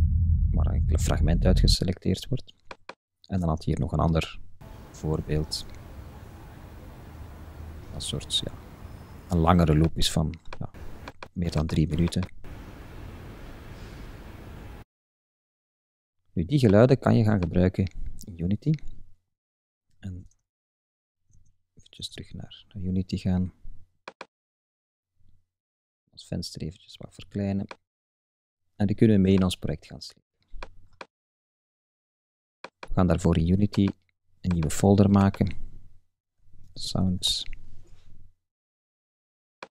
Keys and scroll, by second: 20.3 super+Tab, 36.4 shift+s, 37.3 Return.